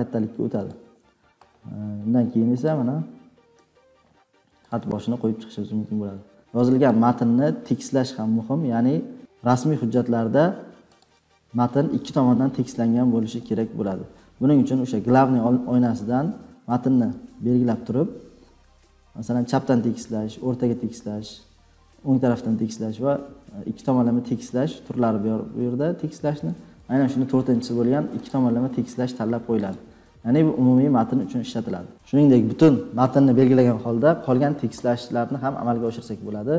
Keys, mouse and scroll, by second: 0.6 click, 2.6 click, 3.5 Tab, 4.6 click, 4.7 Tab, 5.2-5.6 scroll, 7.2-9.9 drag, 11.0-13.8 drag, 17.6 ctrl+a, 29.5-30.5 drag.